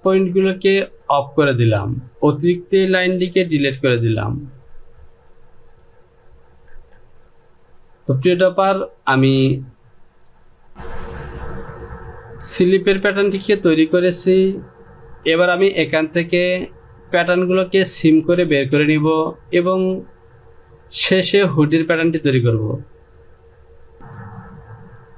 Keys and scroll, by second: 3.2 Delete, 6.8 Return, 15.1 Home.